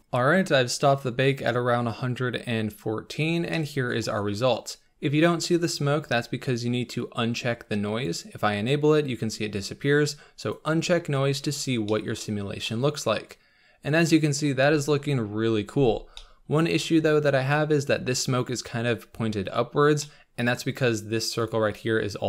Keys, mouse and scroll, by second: 0.0-8.8 middle drag, 8.8 click, 10.8 click, 11.4-11.9 scroll up 4, 11.9 middle click, 12.3-12.7 scroll down 4, 12.7-14.6 middle drag, 14.6-16.2 scroll up 1, 16.2-19.6 middle drag, 19.6-20.0 scroll up 4, 20.0-21.5 middle drag, 21.5 click.